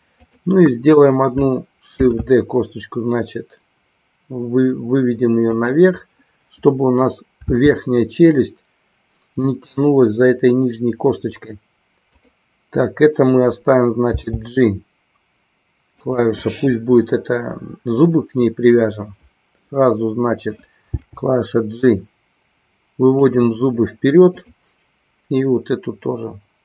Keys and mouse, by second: 2.7 shift+d, 24.4-25.4 drag.